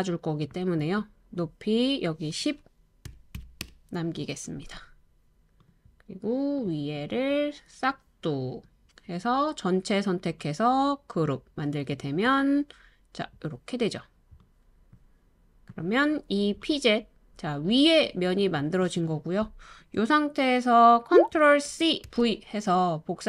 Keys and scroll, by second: 2.8-3.8 typing, 16.9-17.7 typing, 21.6 ctrl+c, 22.0 super+v.